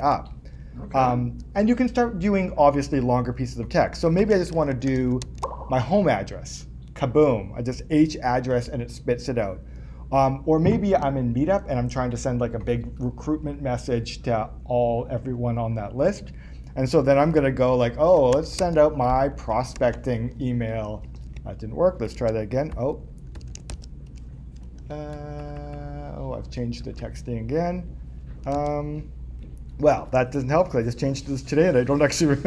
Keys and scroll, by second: 25.4 BackSpace, 28.5 super+Tab.